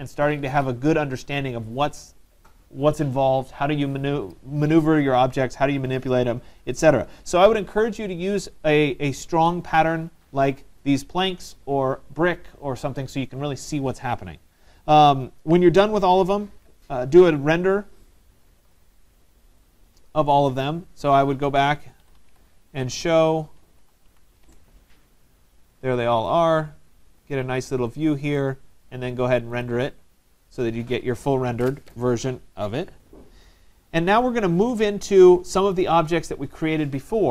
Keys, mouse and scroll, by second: 9.3 right click, 10.1 middle click, 10.3 middle click, 22.0 Escape, 22.2 Escape, 22.3 Escape, 23.0-25.2 typing.